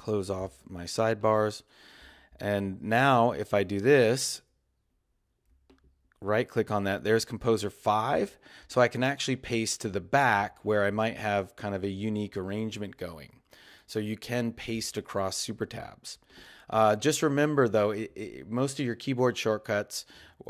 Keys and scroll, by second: 6.9 Up.